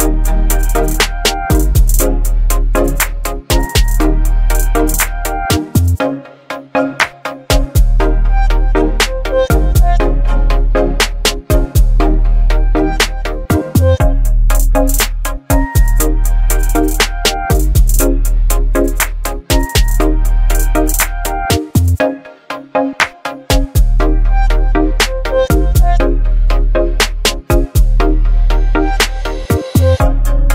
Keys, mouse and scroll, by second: 1.0-2.9 drag, 5.7 click, 9.7 ctrl+click, 13.5 click, 13.7 ctrl+j, 15.0 click, 22.4 click, 23.7-24.4 alt+scroll up 2, 24.4-25.0 alt+scroll up 1, 25.3-25.6 click, 25.5 space, 26.3 v, 26.7 ctrl+t, 29.7 ctrl+t, 29.8-30.5 alt+drag.